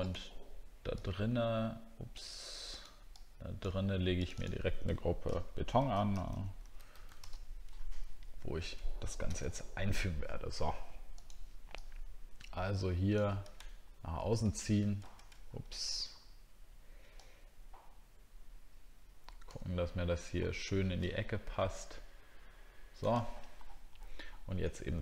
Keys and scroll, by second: 13.6 super+scroll up 1, 15.4 alt+scroll up 2, 16.2 alt+scroll up 1, 19.7 alt+scroll up 1, 24.2 alt+scroll down 1.